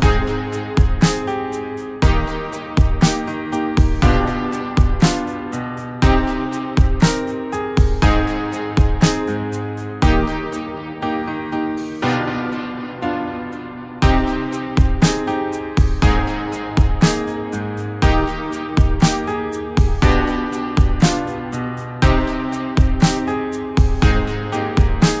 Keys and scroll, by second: 0.6 ], 0.7 ], 1.1 ], 4.3 ], 10.1 ], 14.6 [, 14.7 [, 15.2 [, 16.2 ctrl+z, 16.6 [.